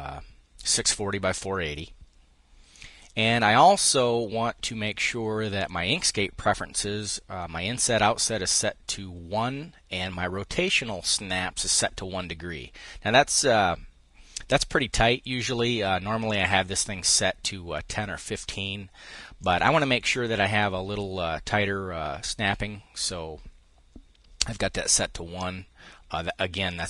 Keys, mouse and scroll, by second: 2.4-3.7 drag, 5.3-6.3 drag, 15.9 click, 19.0-22.6 drag.